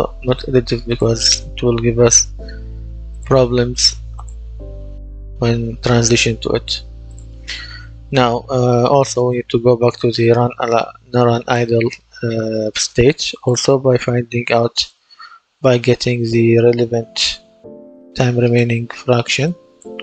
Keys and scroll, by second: 15.2-17.7 typing.